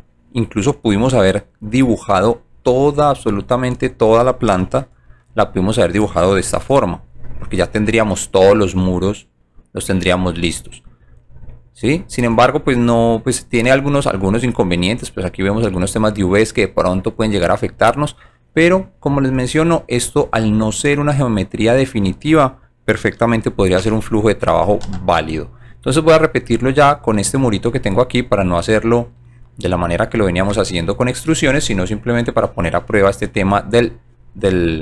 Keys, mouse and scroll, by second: 7.2 shift+click, 7.3 1, 7.8 click, 8.2-10.2 alt+drag, 10.5 alt+right click, 11.2 alt+click, 12.3 alt+right click, 13.6 alt+right click, 14.2 alt+click, 15.8 alt+click, 17.1 alt+right click, 17.6-19.1 alt+drag, 19.3 alt+right click, 19.8 alt+click, 20.2 alt+right click, 20.8 alt+middle click, 24.9 alt+j, 25.3 alt+middle click, 26.0-27.1 alt+right drag, 28.2-29.0 alt+right drag.